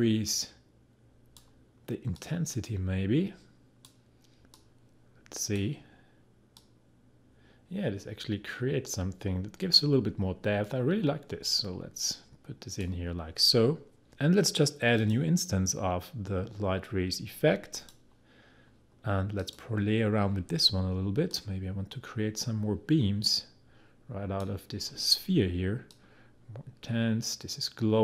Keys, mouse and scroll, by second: 15.2 click, 17.7-28.0 drag.